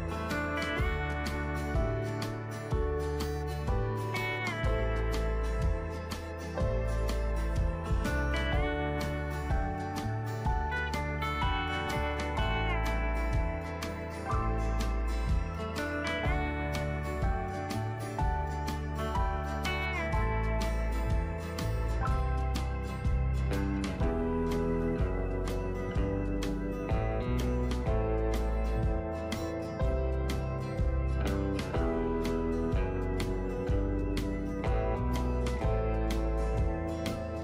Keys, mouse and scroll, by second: 0.1 scroll down 1, 1.3-16.6 drag, 16.7 Down, 17.1 Down, 17.2 typing, 20.3 click, 26.9 right click, 27.9 click, 28.9 x, 32.7-37.4 drag.